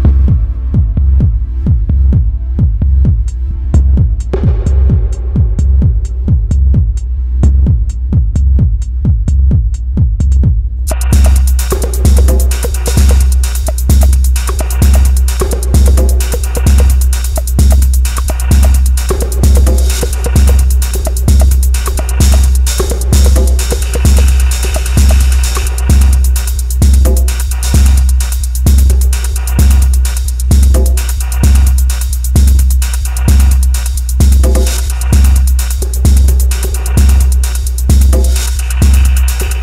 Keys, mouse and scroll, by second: 5.6 click, 6.8 click, 18.5-19.3 scroll up 2, 19.3 scroll down 2, 19.4 scroll down 1, 19.6 middle click.